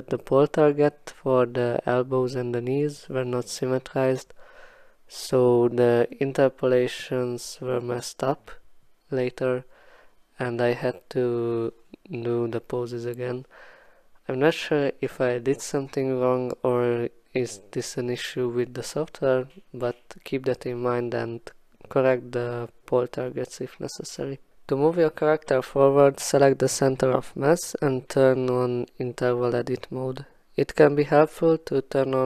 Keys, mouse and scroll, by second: 0.6 click, 3.0-5.6 alt+scroll, 7.7 click, 9.3 click, 12.1 click, 14.5 click, 16.5 click, 19.0 click, 21.2 click, 23.1-23.5 alt+scroll, 24.1 alt+scroll, 25.6-26.3 alt+scroll, 27.3-27.8 alt+scroll, 28.0 click, 28.4 w, 29.8 click, 30.4 click, 31.4 click.